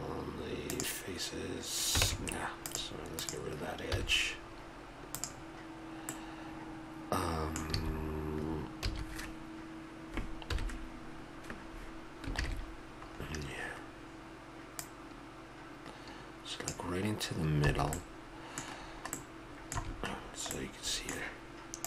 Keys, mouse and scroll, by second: 2.0 ctrl+Tab, 3.9 x, 6.1-7.2 middle drag, 7.7 s, 8.8 a, 10.5 KP_1, 12.3 ctrl+KP_1, 13.7-14.8 middle drag, 17.7 click, 17.7 a, 18.2-20.7 middle drag, 19.8 a.